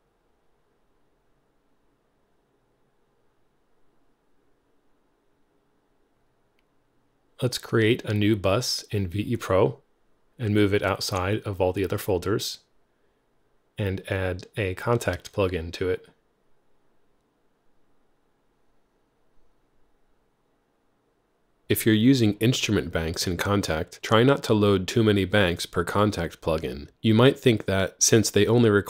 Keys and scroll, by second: 2.6-4.2 typing, 2.9 Return, 6.7 super+b, 19.3 F3.